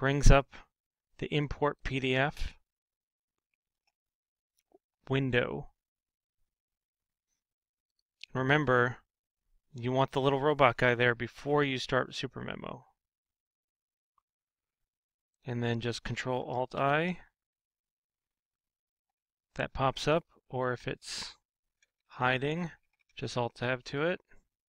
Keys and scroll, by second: 19.8 alt+Tab, 23.2 alt+Tab.